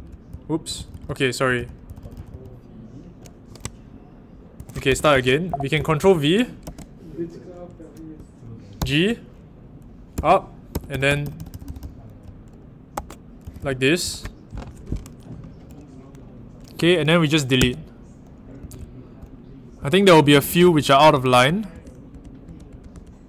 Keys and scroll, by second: 0.0-2.2 typing, 4.4-6.4 typing, 6.6 ctrl+v, 8.7 shift+g, 10.1 k, 10.6 w, 13.1-14.0 typing, 17.5 d, 18.5-20.6 typing, 21.0 ctrl+d.